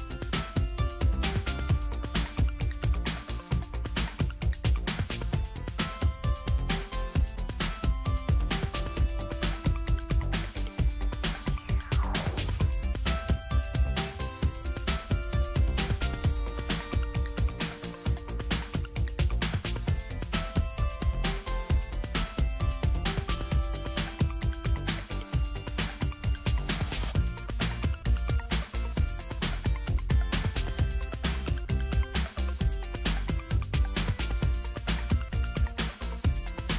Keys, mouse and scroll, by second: 3.3-4.6 ctrl+scroll up 2, 6.1 click, 7.8 click, 11.1 click, 16.0 ctrl+c, 18.5 ctrl+v, 21.1 click, 24.5 click, 26.1-27.1 ctrl+scroll down 2, 28.3-28.8 ctrl+scroll down 2, 29.5-30.1 ctrl+scroll up 2, 30.1-30.5 ctrl+scroll up 1, 32.0 right click, 34.3 click.